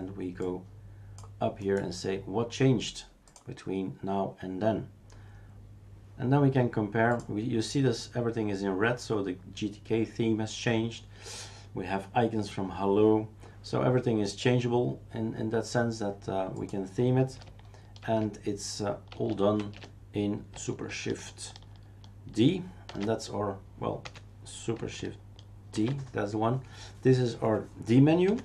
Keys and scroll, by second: 18.1 shift+super+q, 19.2 shift+super+q, 19.6 shift+super+q, 22.8 shift+super+s, 24.0 Escape, 25.7 shift+super+d, 28.2 Escape.